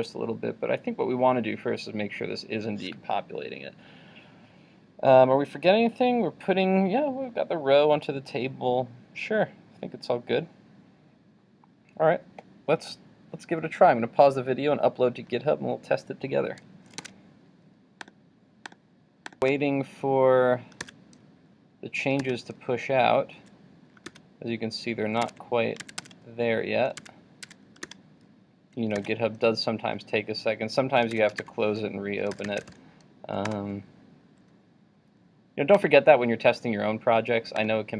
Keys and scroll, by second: 17.0 super+Tab, 19.5 super+r, 25.4 super+Tab, 28.0 super+r, 31.3 super+w, 31.4 super+t.